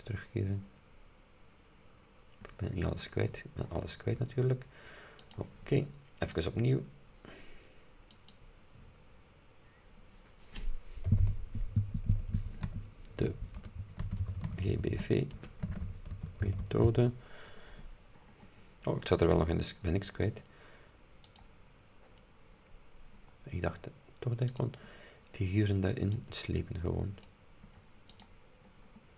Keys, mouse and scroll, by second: 3.0-3.3 scroll down 2, 3.7-4.6 scroll up 2, 5.3 click, 6.4 click, 8.2 click, 11.2 g, 12.2 BackSpace, 13.3-17.4 typing, 18.4-18.7 scroll down 2, 19.2-20.1 scroll down 4, 21.3 click, 24.6 click, 26.2-27.5 drag, 28.3 click, 28.9-29.1 scroll down 2.